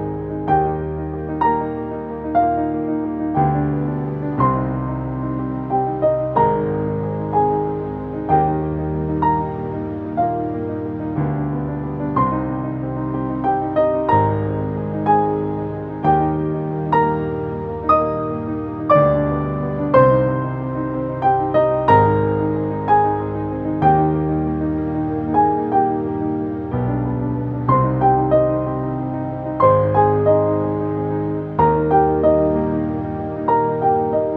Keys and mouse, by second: 0.8 click, 2.7-4.8 typing, 7.9 click, 10.8 click, 11.7 typing, 14.4 click, 15.2 0, 18.0 click, 18.8-20.9 typing, 24.2 click, 25.2 Up, 27.8 click, 31.3 click, 33.7 click.